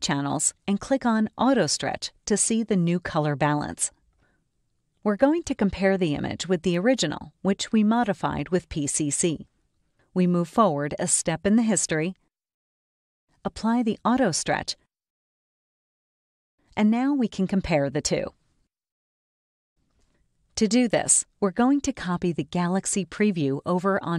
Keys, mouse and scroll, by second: 2.9 click, 9.5 right click, 11.1 click, 13.5 click, 15.5 right click, 18.4 click, 20.0 click, 22.4 click.